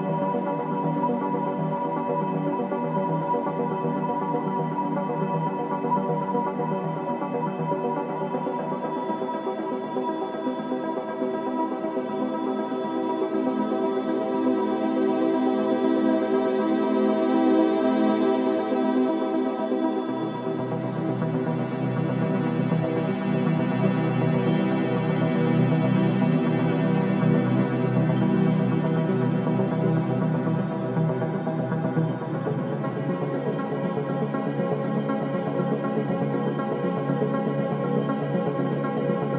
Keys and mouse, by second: 3.4 shift+d, 7.3 click, 9.5 click, 11.0-12.2 drag, 14.3 r, 24.7 shift+d, 29.4 click, 30.7 shift+d, 33.5 shift+d.